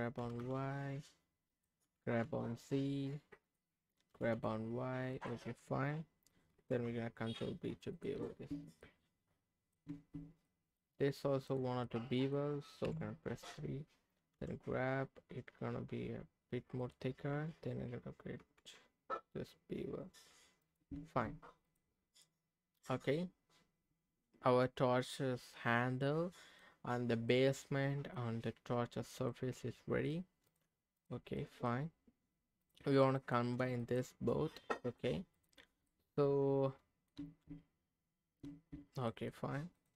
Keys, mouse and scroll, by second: 0.4 g, 0.4 y, 1.5 click, 1.8 g, 2.2 z, 3.4 click, 4.1 g, 4.3 y, 5.1 click, 6.5 ctrl+b, 7.9 click, 8.1 Tab, 8.8 middle click, 9.9 Tab, 10.5 middle click, 11.5 click, 11.8-12.8 middle drag, 12.8 KP_3, 14.3 g, 16.8 click, 18.4 ctrl+b, 20.6 click, 20.9 Tab, 21.6 click, 22.0 scroll down 2, 22.2-26.6 middle drag, 27.3 middle click, 29.3 middle click, 30.5 click, 31.0 click, 31.4 middle click, 32.6 click, 33.0 middle click, 33.8 shift+click, 34.9 click, 35.3 click, 35.9-37.1 middle drag, 37.2 Tab, 38.4 Tab, 39.1 middle click, 39.8 click.